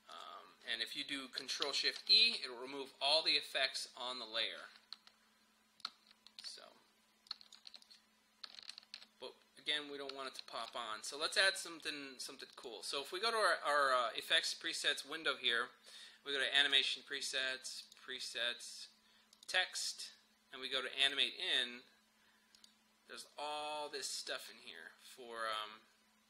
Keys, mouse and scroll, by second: 2.0 ctrl+shift+e, 5.9-12.6 drag, 16.7 click, 23.5-24.4 scroll down 1.